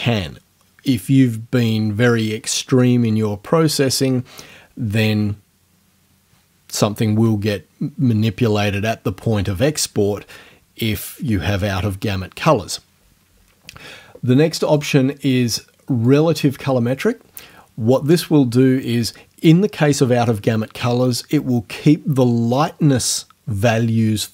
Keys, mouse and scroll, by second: 14.7 click, 16.1 click.